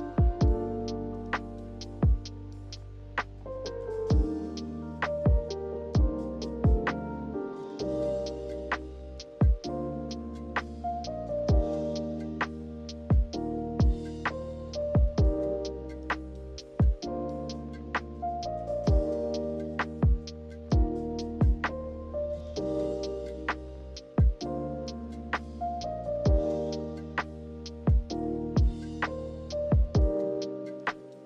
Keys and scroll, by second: 0.3 d, 8.1 z, 9.7 z, 17.2 v, 18.1 Delete, 27.2 0, 27.4 Return.